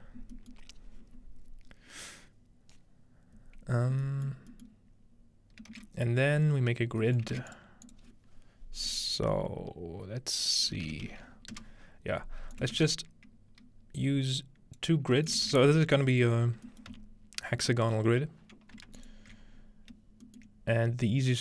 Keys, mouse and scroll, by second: 4.7-5.7 middle drag, 5.7 shift+a, 6.8 scroll down 2, 7.2-9.1 shift+middle drag, 7.4 scroll down 1, 7.5 shift+a, 7.5-9.7 drag, 10.7-11.6 typing, 12.6-16.2 ctrl+drag, 12.7 typing, 13.0-13.6 ctrl+scroll down 1, 13.6 scroll up 1, 15.0-15.9 scroll up 1, 15.9-17.6 scroll down 1, 16.9 typing, 17.6-18.8 middle drag, 17.9-19.5 scroll up 2, 19.0 alt+shift+click, 19.5-20.5 scroll down 1, 20.5-21.4 shift+middle drag.